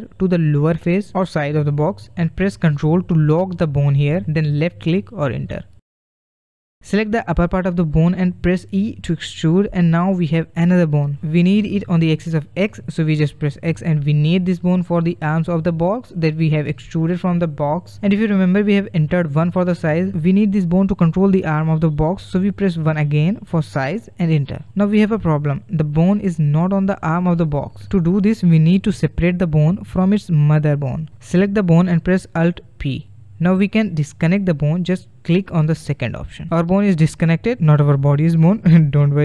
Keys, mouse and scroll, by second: 6.9 click, 8.3 e, 30.6 click, 32.4 alt+p, 37.6 g.